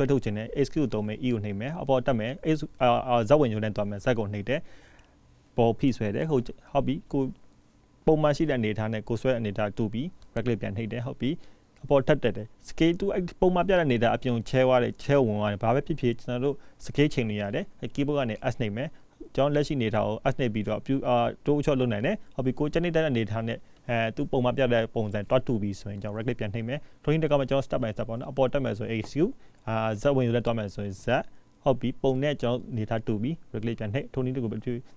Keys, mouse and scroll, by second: 1.1 e, 11.5 s, 17.5 e, 24.8 e, 25.5 s, 28.6 ctrl+z, 29.1 e.